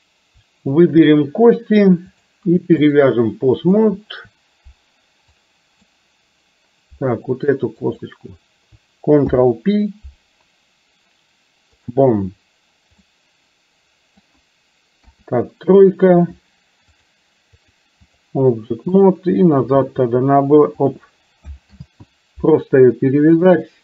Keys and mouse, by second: 0.8 shift+click, 2.1 click, 5.4 click, 7.9 click, 9.4 ctrl+p, 13.1-14.3 middle drag, 15.1 KP_3, 17.8 click, 20.2 r, 21.8 ctrl+z, 23.4 click.